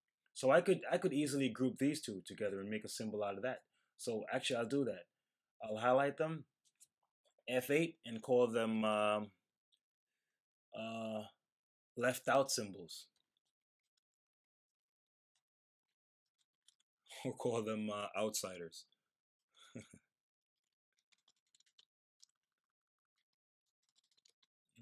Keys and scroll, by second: 7.6 F8, 11.8-13.4 typing, 16.3 typing, 18.2-24.7 typing.